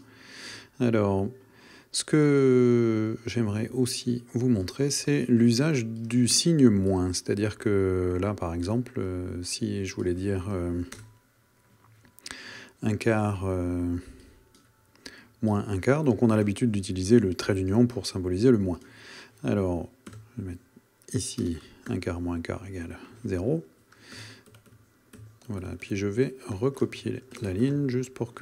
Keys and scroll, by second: 11.0 Return, 16.4 -, 20.1 =, 21.4 space, 25.2 shift+super+Left, 26.6 super+c, 26.9 Right.